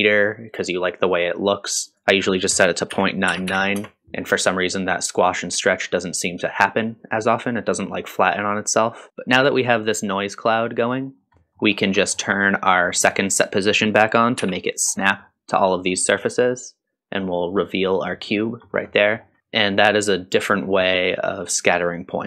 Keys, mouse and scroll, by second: 1.9-5.0 drag, 3.5 KP_9, 9.1 click, 9.1 scroll down 2, 9.1 m, 9.3 middle click, 11.1 scroll up 1, 11.4 middle click, 11.7 scroll up 2, 12.0 middle click, 13.0 middle click, 13.7 click, 14.4 m, 14.8 scroll down 1, 15.1 middle click, 17.8 click, 18.4-18.9 scroll down 2, 18.9 middle drag, 19.4-20.0 scroll up 4.